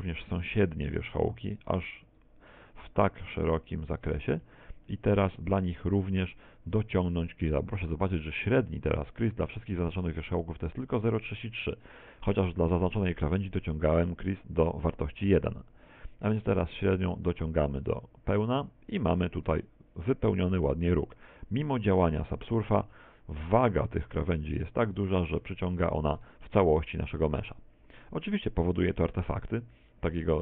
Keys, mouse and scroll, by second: 1.1 shift+right click, 1.5 shift+right click, 2.1 shift+right click, 2.5 shift+right click, 2.9 middle click, 4.0 shift+right click, 4.5 middle click, 4.9 middle click, 12.1 middle click, 12.7 middle click, 17.0 click, 19.4 middle click, 19.9 scroll up 5, 20.9 Tab, 21.5 middle click, 22.6-23.3 scroll down 8, 25.4 middle click, 26.2 middle click, 26.7 shift+middle click, 28.7 middle click, 29.9 shift+middle click.